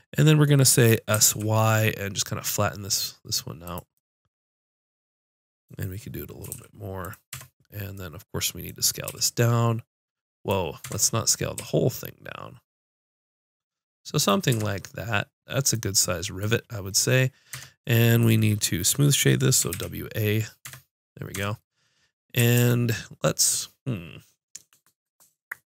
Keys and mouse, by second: 1.1 s, 6.4 s, 7.3 Tab, 9.0 s, 10.9 Tab, 11.5 s, 14.5 Tab, 17.5 Tab, 19.6 w, 20.6 Tab, 21.3 Tab, 22.5 ctrl+Tab.